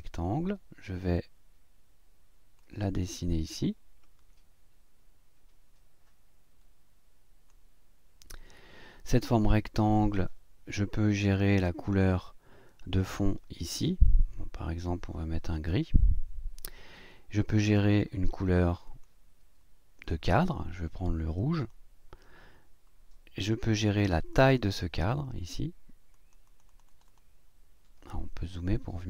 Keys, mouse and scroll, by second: 2.6-7.7 drag, 9.4-10.4 drag, 11.4 click, 15.5 click, 18.8 click, 21.5 click, 24.3 click, 26.1 click, 28.6-29.0 ctrl+scroll up 5.